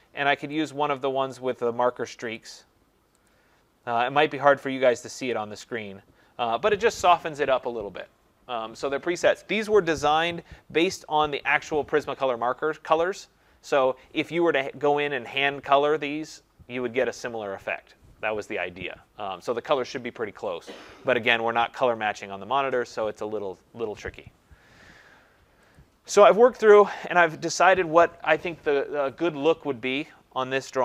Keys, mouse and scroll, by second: 0.7 click, 3.3 click, 5.3 click, 9.3 click, 25.7 click.